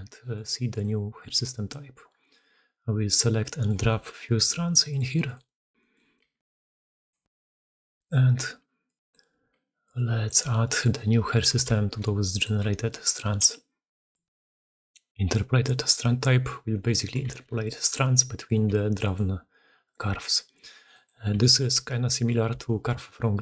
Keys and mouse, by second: 0.2 click, 0.5 click, 2.5-3.2 drag, 3.3 middle drag, 3.7 shift+middle drag, 4.8 middle click, 5.6 middle click, 6.0-10.2 typing, 6.5-7.0 drag, 7.7-8.0 drag, 8.7-9.0 drag, 9.7-10.2 drag, 10.5 drag, 11.6 e, 12.6 g, 14.0-15.7 drag, 16.6 drag, 17.3 g, 18.7 g, 20.6 g, 21.3 g, 22.3 e.